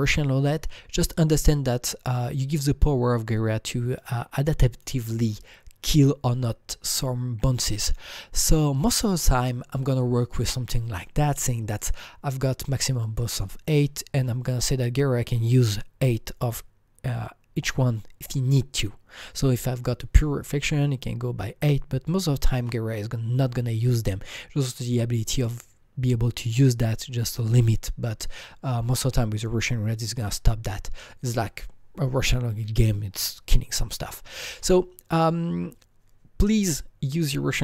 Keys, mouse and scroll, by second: 3.4-4.9 drag, 6.1-7.4 drag, 34.7-37.1 drag, 34.7-35.7 scroll down 3.